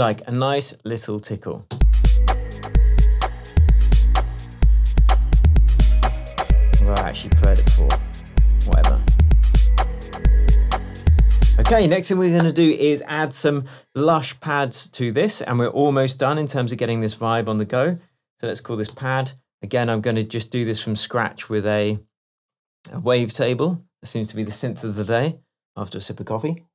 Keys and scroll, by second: 1.8 space.